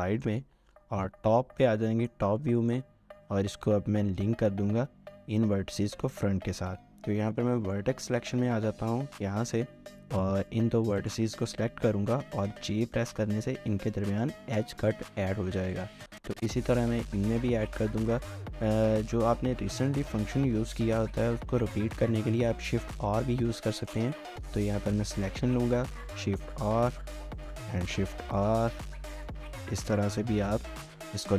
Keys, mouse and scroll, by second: 0.0 middle click, 1.1 7, 1.9 shift+middle click, 2.3 scroll up 1, 2.6 shift+middle click, 7.3 1, 11.0 shift+click, 16.0 j, 16.6 shift+click, 22.9 r, 24.7 shift+click, 25.8 r, 27.3 shift+click, 27.7 r, 29.1 shift+click, 29.9 r, 30.5 shift+click, 30.7 r.